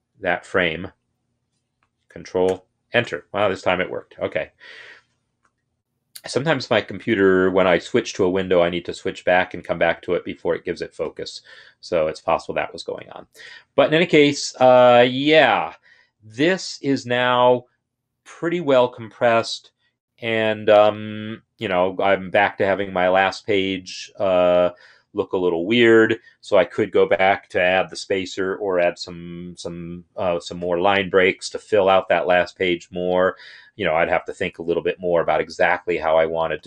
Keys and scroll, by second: 2.4 ctrl+Return.